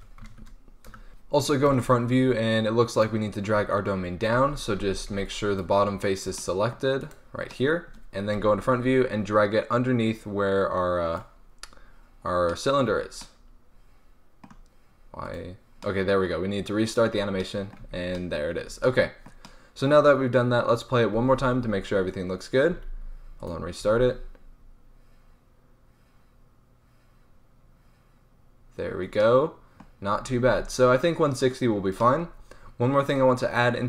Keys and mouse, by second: 1.1 a, 1.6 KP_1, 3.5 Tab, 4.3 a, 4.7 a, 5.0 b, 5.3 click, 6.9-10.0 right drag, 8.3 KP_1, 10.0-11.1 drag, 11.4 click, 12.8 Tab, 15.7-16.1 drag, 16.1-17.7 middle drag, 17.7 Tab, 18.6 Tab, 21.1 alt+a, 22.7 alt+a, 23.3-23.8 drag, 23.8 alt+a, 25.2-29.4 middle drag, 30.3 alt+a.